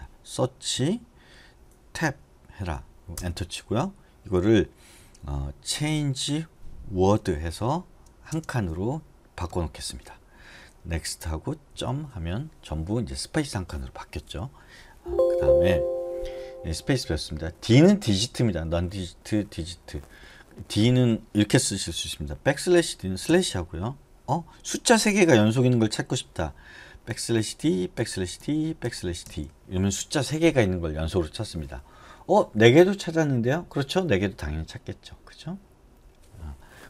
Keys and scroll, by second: 1.0 /, 2.1 Tab, 3.4 Return, 6.2 c, 7.4 w, 8.5 space, 9.7 Escape, 11.2 n, 15.4 Escape, 23.5 typing, 27.1-29.9 typing.